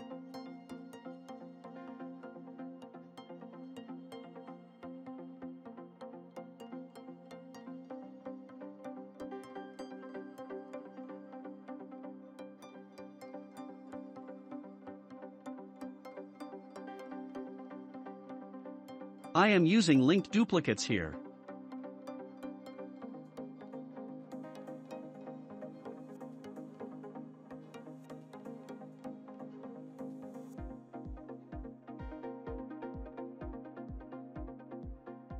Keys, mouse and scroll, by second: 1.3-2.3 shift+middle drag, 2.3-2.7 scroll up 4, 2.7-3.6 middle drag, 3.6 click, 5.5-5.9 scroll down 1, 5.9-8.2 shift+middle drag, 8.2 s, 9.9-10.3 drag, 10.3-10.9 scroll down 5, 10.9 scroll down 1, 10.9-11.7 middle drag, 11.7-12.2 scroll up 1, 12.4 click, 13.1 ctrl+a, 15.4-16.5 shift+middle drag, 16.5-17.1 scroll up 1, 17.9 alt+d, 17.9-18.2 scroll up 2, 23.4 shift+click, 24.1 alt+d, 26.8 drag, 27.1-27.5 scroll down 3, 27.5-29.5 shift+middle drag, 29.5-30.3 scroll up 2, 30.3-34.0 middle drag, 34.0 click, 34.4-34.9 scroll down 1, 34.9-35.3 shift+middle drag.